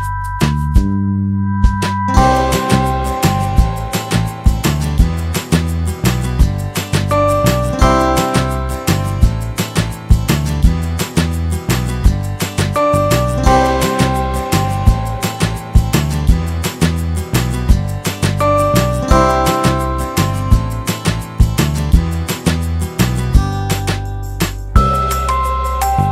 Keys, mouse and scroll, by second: 0.0 click, 1.2 click, 1.8 ctrl+z, 2.1 middle click, 2.2 scroll down 1, 2.8 scroll down 1, 3.3 middle click, 4.0 middle click, 5.0 click, 6.8 click, 8.7 click, 13.1 click, 16.1 click, 18.1 click, 19.3 shift+click, 24.1 click, 24.7 click, 25.5 click.